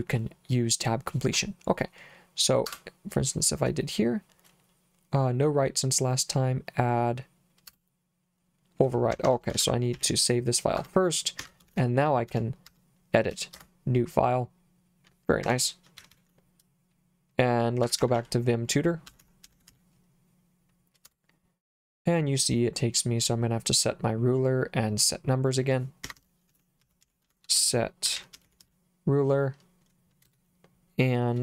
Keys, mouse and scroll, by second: 2.7 Return, 7.7 Return, 9.1 Escape, 9.6 shift+;, 10.0 w, 10.8 Return, 11.4 Escape, 11.7 shift+;, 12.3 Up, 12.7 Up, 13.5 Return, 15.5 Escape, 16.0 shift+z, 16.1 shift+z, 17.6-20.2 typing, 21.1 Return, 26.1 Escape, 26.3-29.1 typing, 30.3 space.